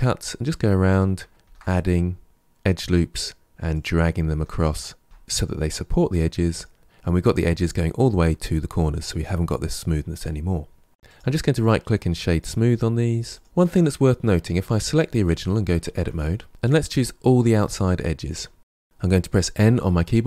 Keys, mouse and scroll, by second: 1.3 ctrl+r, 3.2 ctrl+z, 4.0 ctrl+r, 5.8 ctrl+r, 6.9 ctrl+r, 7.6 Tab, 7.8-8.8 middle drag, 11.0-13.4 right drag, 13.4 click, 14.5 click, 15.7 Tab, 16.4 alt+shift+click, 16.8 alt+shift+click, 17.4 alt+shift+click, 19.5 n.